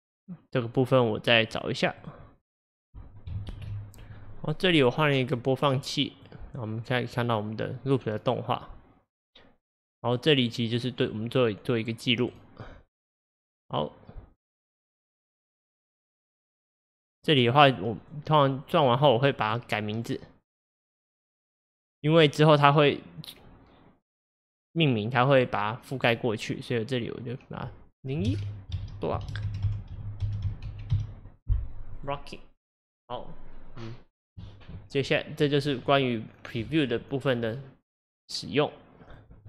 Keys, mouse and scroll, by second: 39.1 click.